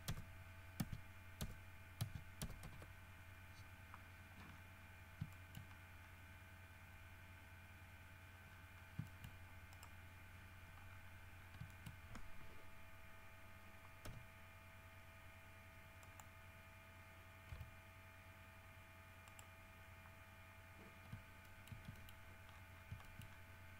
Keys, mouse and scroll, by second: 0.2 KP_0, 0.9 Tab, 1.5 KP_0, 2.1 Tab, 2.6 KP_0, 2.8 KP_Enter, 4.7-5.2 scroll up 4, 5.5 shift+middle click, 5.9-6.5 shift+scroll up 4, 8.6-9.2 scroll down 1, 9.2 shift+middle click, 9.9 shift+right click, 11.1-11.8 scroll down 4, 11.9 shift+middle click, 16.2 middle click, 17.7 r, 19.4 right click, 21.1 scroll down 3, 21.6 shift+middle click, 22.1 shift+middle click, 22.4-23.7 shift+scroll up 9, 23.2 shift+middle click.